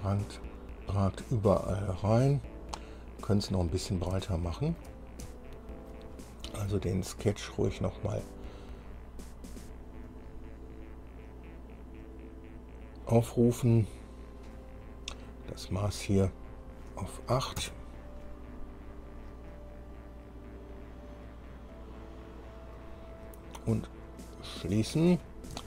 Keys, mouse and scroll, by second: 4.0 scroll down 2, 4.5 shift+middle click, 5.6 shift+click, 7.0 scroll down 2, 7.7-8.0 scroll down 2, 10.3 click, 12.2 click, 12.8-13.1 scroll down 2, 13.6 click, 14.9-15.5 scroll up 1, 16.5 click, 17.6 KP_8, 17.8 KP_Enter, 19.7-23.1 drag, 24.1 click, 25.4 scroll down 2.